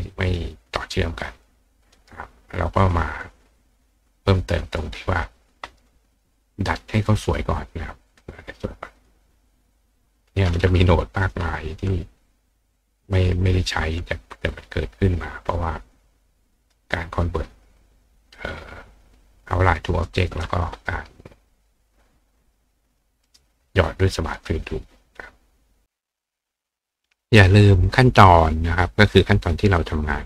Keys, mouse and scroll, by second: 1.3 click, 1.9 right click, 3.2 click, 4.7 click, 6.6 click, 8.0 click, 8.9 click, 10.7-11.3 drag, 13.1-13.7 drag, 15.1-15.9 drag, 16.8-18.0 drag, 18.2 click, 19.7 click, 20.4 click, 22.8 click, 23.2 right click, 25.8 click.